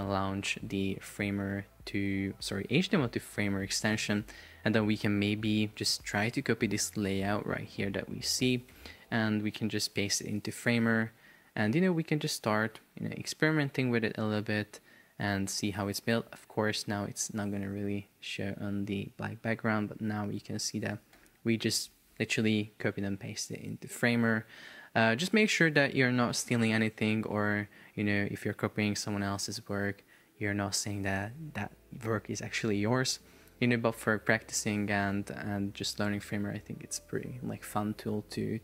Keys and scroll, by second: 4.0 Escape, 7.7 shift+super+4, 8.9 Escape, 9.2 super+Tab, 10.9 super+v, 21.2 Escape.